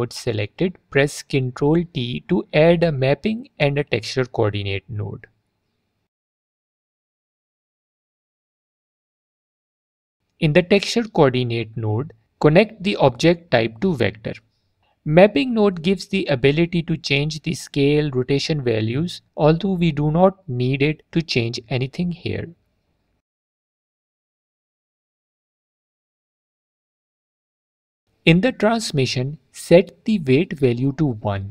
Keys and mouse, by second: 1.3 ctrl+t, 2.5 middle click, 3.3 click, 4.1 click, 8.1 alt+click, 10.8 click, 11.1 click, 18.3-20.0 drag, 20.2 click, 22.9 alt+drag, 24.0 click, 24.6 click, 25.2 middle click, 26.3 middle click, 28.9 click, 30.5-31.5 drag.